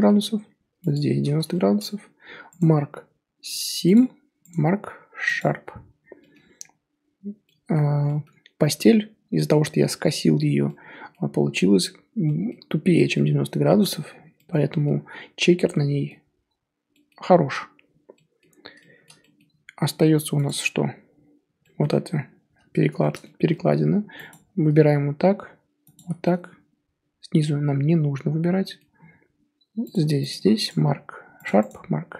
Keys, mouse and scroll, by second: 0.9 alt+shift+click, 1.5-3.9 shift+middle drag, 3.9-5.6 right drag, 5.6 scroll down 3, 6.2-6.6 middle drag, 6.6 Tab, 7.4-7.7 middle drag, 7.7 scroll up 1, 8.0-17.8 middle drag, 17.8 scroll down 3, 18.1-20.4 middle drag, 20.4 click, 20.7 Tab, 21.6 middle drag, 21.9-23.0 scroll up 3, 23.0-24.3 shift+middle drag, 24.3 alt+click, 25.9 alt+shift+click, 26.2-29.9 middle drag, 29.9 alt+shift+click, 30.3 alt+shift+click, 31.4-32.1 right drag.